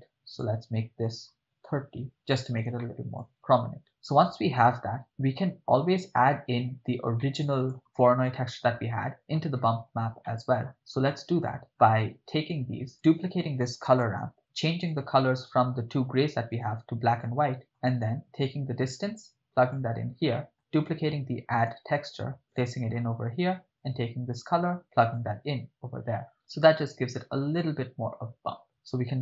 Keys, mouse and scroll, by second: 2.8-3.2 shift+middle drag, 3.3-3.8 ctrl+middle drag, 7.2-7.8 ctrl+middle drag, 8.9-9.4 ctrl+middle drag, 10.2-10.7 middle drag, 11.1 ctrl+middle click, 12.1 click, 12.6-12.9 drag, 12.9 right click, 14.1 shift+d, 14.8 click, 15.2 ctrl+middle click, 16.5 drag, 17.1 click, 17.6 middle click, 19.0-19.8 drag, 20.3 middle click, 20.8 click, 21.7 shift+d, 22.8 click, 24.3-25.6 drag, 28.6-29.2 middle drag.